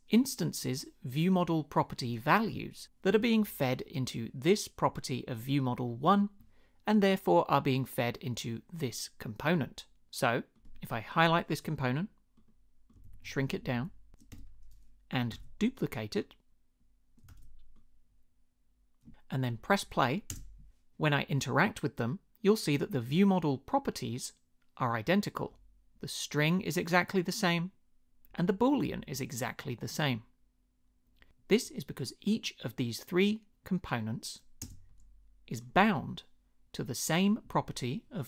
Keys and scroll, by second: 13.0 shift+Down, 13.6 shift+Down, 14.3 Return, 15.3 super+d, 17.3 super+d, 20.3 space, 34.6 space.